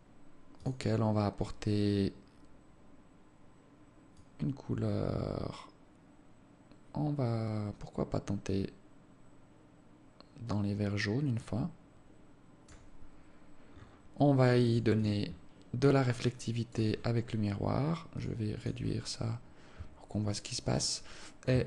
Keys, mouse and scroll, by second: 1.1 click, 14.1 scroll down 7, 15.1 click, 15.4 click, 15.7-16.1 scroll down 2, 16.7 click, 17.5-17.9 scroll up 6, 18.6 click, 19.1 click, 19.5 scroll down 1.